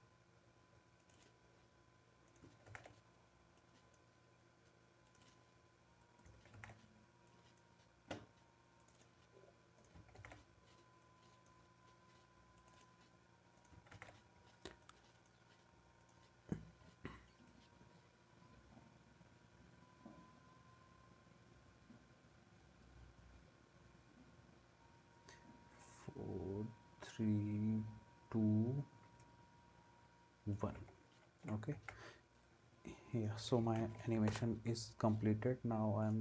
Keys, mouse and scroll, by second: 2.7 ctrl+v, 6.6 ctrl+v, 10.2 ctrl+v, 13.9 ctrl+v, 31.8 ctrl+s, 33.8 ctrl+s, 34.3 ctrl+m.